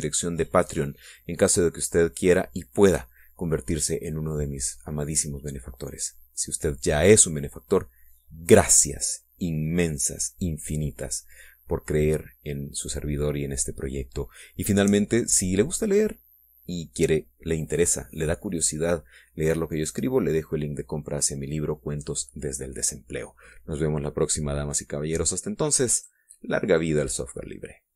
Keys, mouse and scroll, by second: 27.1 click.